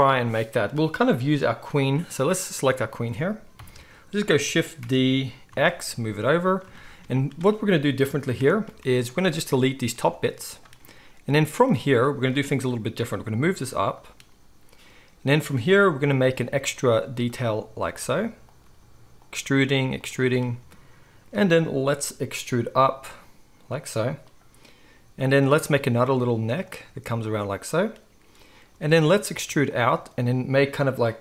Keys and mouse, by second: 3.5 KP_1, 4.8 shift+d, 8.3 Tab, 8.6 z, 9.3-13.4 drag, 9.9 x, 12.6 g, 13.4 middle click, 13.9 click, 14.0-31.2 middle drag, 16.0-19.3 typing, 22.7 e, 24.9 e, 25.6 e, 26.2 e, 26.8 e, 28.7 e, 29.9 e.